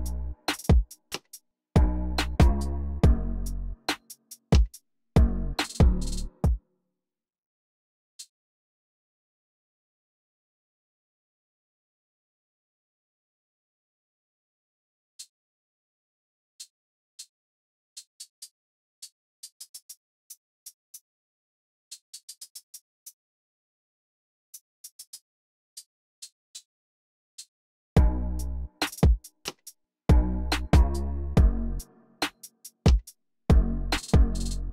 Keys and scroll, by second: 6.1 space, 8.7 super+j, 18.1 alt+Page_Up, 18.3 alt+Page_Up, 19.0 alt+Page_Down, 19.3 alt+Page_Up, 22.0 alt+Up, 22.2 alt+Up, 24.4 Right, 24.7 alt+Down, 26.1 Right, 26.4 alt+Down, 27.3 alt+Up, 27.7 space.